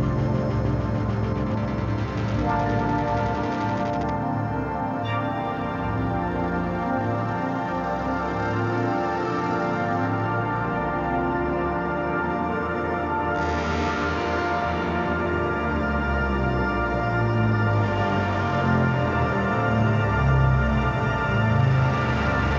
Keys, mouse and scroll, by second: 7.9 ctrl+y, 14.5 space, 14.6 click, 14.8 space, 15.3 ctrl+y, 16.1 click, 17.6-19.4 drag, 21.6 click.